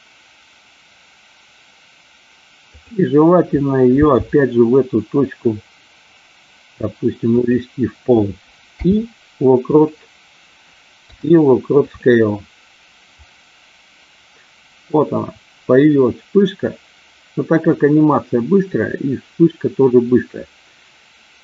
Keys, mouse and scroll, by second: 2.6 click, 4.0 g, 7.3 click, 8.7 i, 11.0 i, 13.2-21.4 drag.